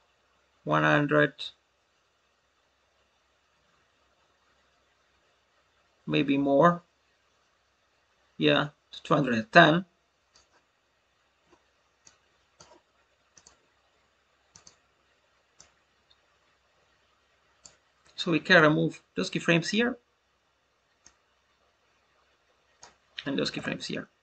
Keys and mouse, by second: 11.9 click, 14.4-23.0 drag.